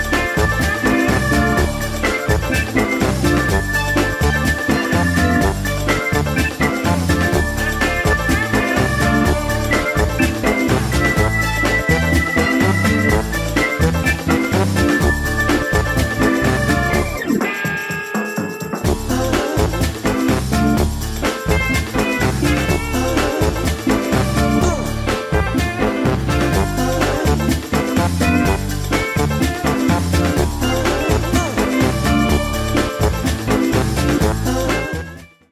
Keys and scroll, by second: 0.8 ctrl+z.